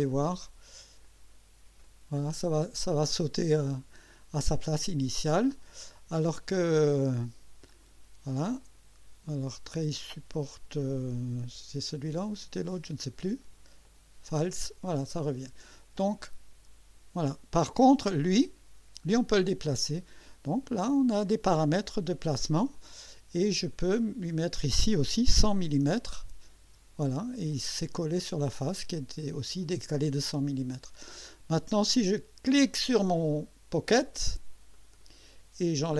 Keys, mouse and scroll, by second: 1.0 click, 1.8-2.6 drag, 7.7 click, 8.6 click, 12.5 click, 13.4 click, 13.8 click, 14.7-16.2 drag, 18.3 click, 20.6 click, 22.3 click, 23.9 click, 25.2 1, 25.6 0, 26.7 Return, 27.5 click, 30.2 scroll up 2, 30.9 scroll up 2, 32.5 click, 34.7 click.